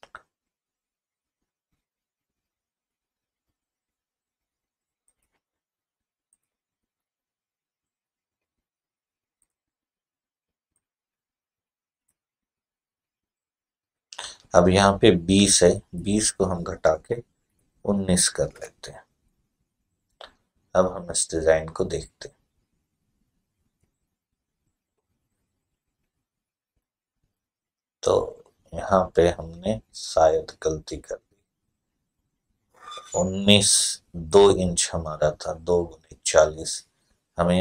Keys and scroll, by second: 17.3-17.6 typing, 18.3 Return.